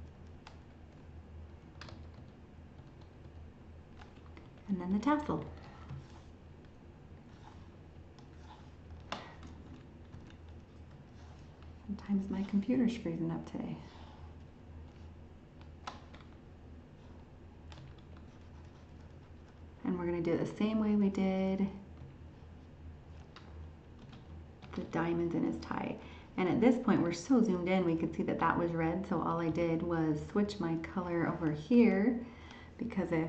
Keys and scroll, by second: 9.7 alt+Tab.